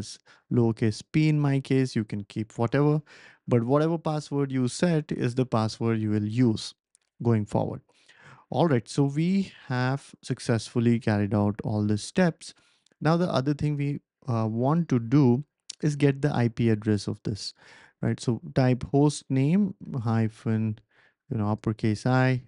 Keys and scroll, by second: 0.9 Return, 1.6 p, 2.6 Return, 9.7 ctrl+l, 17.2-20.3 typing, 21.5 Return.